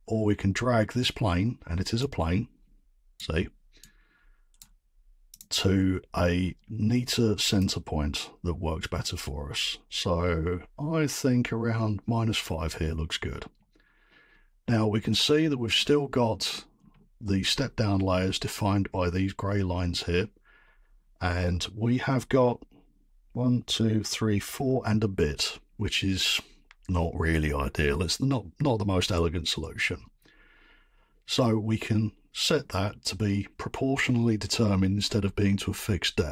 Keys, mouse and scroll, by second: 3.1 right click, 4.0 right click, 4.1 right click, 4.3 right click, 5.4 click, 6.3-8.2 scroll, 12.4 click, 15.7-16.7 scroll down 5, 16.7 scroll.